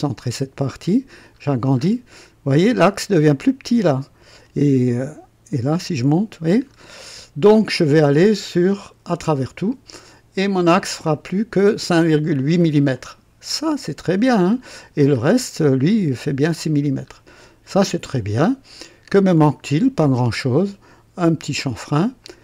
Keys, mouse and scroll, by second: 0.1 click, 0.6 middle click, 1.3-2.1 scroll up 2, 2.7-4.6 drag, 5.5-5.8 scroll up 2, 6.6-7.7 scroll down 5, 8.4 click, 9.1 click, 9.9 scroll down 1, 10.9 click, 12.5 scroll down 1, 12.9-14.3 drag, 14.5-15.4 scroll up 3, 16.6-17.6 scroll down 6, 18.1 click, 19.1 right click, 22.2 click.